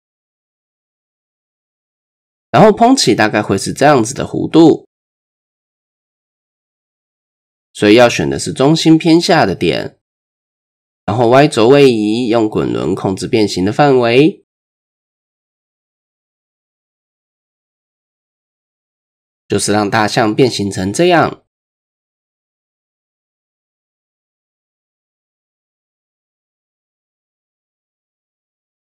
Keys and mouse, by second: 3.3 KP_3, 4.8 d, 5.4 d, 5.4-6.7 drag, 6.7 d, 6.7 d, 7.1 ctrl+z, 7.4 middle click, 10.1 KP_3, 11.8-14.6 drag, 15.6 ctrl+z, 16.2-20.3 drag, 20.9-21.7 middle drag, 22.0-22.6 middle drag, 23.2-24.6 middle drag, 24.9 middle click, 25.7 KP_1, 26.0 KP_3, 27.0 shift+middle click, 27.6-28.9 middle drag.